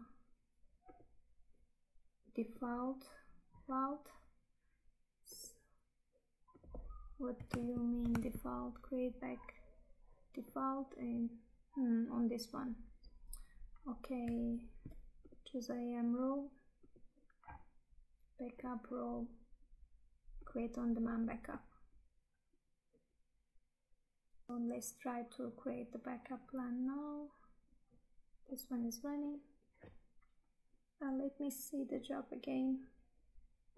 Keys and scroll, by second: 7.8 Tab, 24.5 Tab.